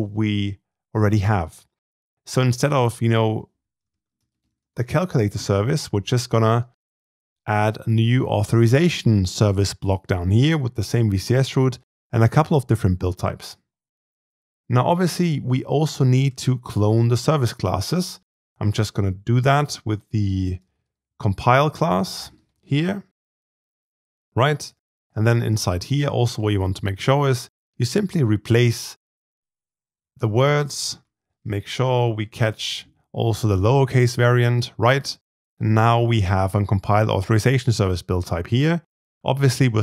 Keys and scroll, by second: 2.6 ctrl+r, 15.3 ctrl+c, 16.2 ctrl+v, 24.9 ctrl+r.